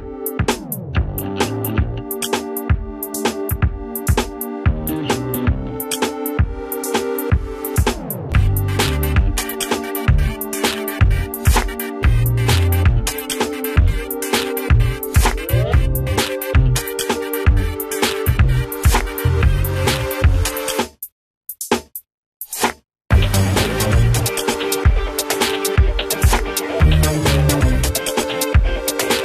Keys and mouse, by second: 1.6 click, 5.5 Delete, 6.9 ctrl+a, 7.4-7.9 typing, 8.7 click, 9.7 F4, 11.7-14.3 drag, 17.1-20.7 drag, 20.7 ctrl+e, 23.8 click.